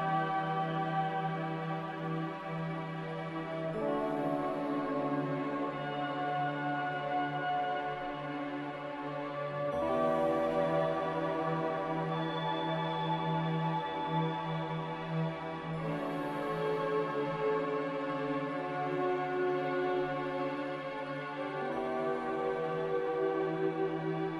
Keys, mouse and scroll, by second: 1.9-4.3 typing, 3.6 Return, 9.3-10.0 typing, 13.0-13.7 typing.